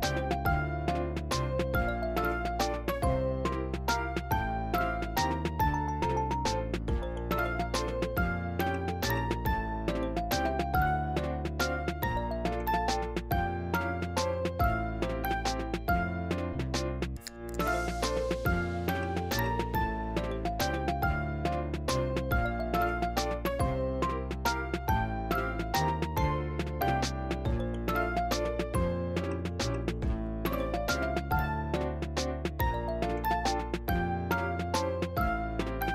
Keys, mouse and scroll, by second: 0.0 Tab, 0.7 click, 0.7 ctrl+z, 0.8 click, 1.3 ctrl+z, 1.4 click, 2.0 click, 2.2 ctrl+z, 2.3 click, 2.7 click, 2.9-3.4 scroll down 2, 3.4-4.5 drag, 4.7 click, 5.3 click, 5.5 scroll down 4, 5.6 n, 5.6 n, 5.6 m, 5.7 scroll up 3, 6.2 shift+middle click, 6.3 click, 6.4 middle click, 6.7 click, 6.7 scroll down 10, 6.9 right click, 7.1 click, 7.1 scroll up 11, 7.3 m, 7.3 middle click, 7.3 m, 7.4 middle click, 7.4 click, 7.7 middle click, 8.0 click, 8.2 scroll down 3, 8.2 click, 8.4 click, 8.5 middle click, 8.6-9.3 scroll up 6, 8.6 click, 9.0 click, 9.3 click, 9.5 middle click, 9.7 ctrl+z, 9.7-10.4 scroll down 4, 9.8 click, 10.2 click, 10.3 middle click, 10.4 click, 10.5 middle click, 10.6 click, 10.7 middle click, 10.8 click, 10.9 middle click, 10.9 click, 11.1 scroll down 1, 11.1 m, 11.2 middle click, 11.2 `, 11.3 scroll up 2, 11.4-12.4 drag, 12.4 middle click, 12.5 click, 12.8 scroll down 1, 12.8 click, 13.0 middle click, 13.0 click, 13.1 middle click, 13.1 scroll up 1, 13.2 click, 13.4 middle click, 13.5 scroll down 3, 13.7 `, 13.8 scroll up 4, 14.0 m, 14.0 scroll down 1, 14.0 middle click, 14.2 click, 14.7 click, 14.7 scroll down 3, 14.7 middle click, 14.8 click, 15.0 middle click, 15.0 click, 15.2 middle click, 15.4-15.8 scroll down 11, 15.8 m, 15.9 m, 16.0 ctrl+z, 16.1 scroll up 11, 16.4 click, 16.5 ctrl+z, 16.7-17.7 drag, 17.7 scroll down 5, 17.8 m, 18.0 click, 18.2 ctrl+z, 18.2 ctrl+z, 18.4 click, 18.5 ctrl+z, 18.6 shift+f, 18.7 click, 19.3 ctrl+z, 19.4 click, 19.7 ctrl+z, 19.8 click, 20.1 scroll down 3, 20.1 click, 20.6 scroll down 1, 20.6 middle click, 20.7 click, 21.0 middle click, 21.0 scroll up 2, 21.1 click, 21.3 middle click, 21.4 click, 21.5 middle click, 21.6 click, 21.9 scroll down 3, 22.0 click, 22.5 scroll down 2, 22.6 m, 22.7 scroll up 10, 22.8 click, 22.9 m, 22.9-23.4 scroll down 9, 23.0 click, 23.3 m, 23.4 scroll up 1, 23.5 click, 23.9 scroll down 1, 23.9 click, 24.9-25.2 scroll down 8, 24.9 click, 25.2 scroll up 10, 25.4 click, 25.5 click, 25.9-26.3 scroll down 4, 26.0 click, 26.2 ctrl+z, 26.2 middle click, 26.3-27.5 drag, 27.5 scroll down 5, 27.5 m, 27.6 `, 27.7-28.1 scroll up 4, 27.9 click, 28.0 shift+middle click, 28.1 right click, 28.2 ctrl+l, 28.2 Tab, 28.3 click, 28.8 click, 29.2 ctrl+z, 29.3 scroll down 3, 29.3 middle click, 29.5 shift+middle click, 29.8 click, 30.4 middle click, 30.5-31.6 drag, 31.6 middle click, 31.7 click, 32.2 scroll down 1, 32.3 click, 32.5 middle click, 33.0 click, 33.8 scroll down 3, 33.9 m, 34.2 scroll up 10, 34.3 n, 34.4 n, 34.8 shift+middle click, 34.9-35.8 scroll up 2, 35.0 m, 35.8 click.